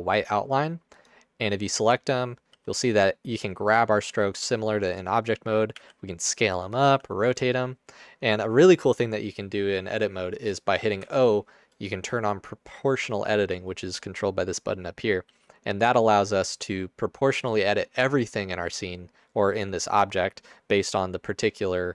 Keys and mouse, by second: 2.6 g, 4.1 g, 5.7 s, 7.0 r, 11.2-12.9 middle drag, 11.2 o, 15.3 g, 19.9 middle click.